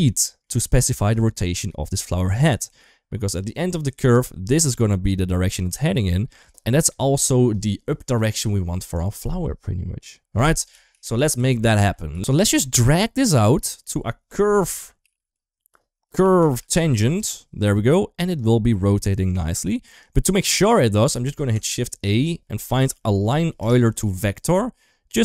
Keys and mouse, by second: 3.3 d, 3.8-6.8 drag, 6.8 d, 6.8 d, 6.9 d, 10.5 ctrl+z, 10.7 ctrl+z, 10.9 ctrl+z, 11.2 ctrl+z, 11.4 ctrl+z, 11.6 ctrl+z, 11.9 ctrl+z, 12.0 ctrl+x, 12.4 shift+middle click, 13.2-18.1 drag, 14.3 u, 18.9 shift+middle click, 19.8 click, 20.9 shift+a, 25.1 click.